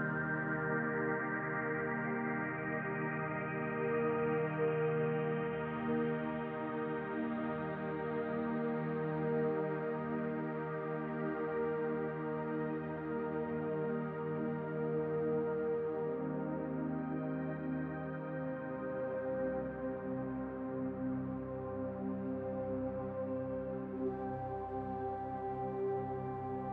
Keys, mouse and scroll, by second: 0.6 Tab, 3.9-7.0 drag, 15.3-18.1 drag, 22.9-25.9 drag.